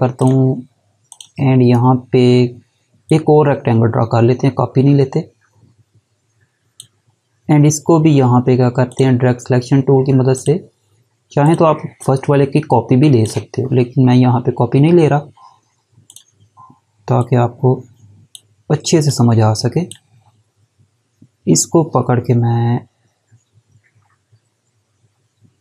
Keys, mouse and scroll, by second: 9.9 click, 11.0 click, 11.6 click, 15.7 click.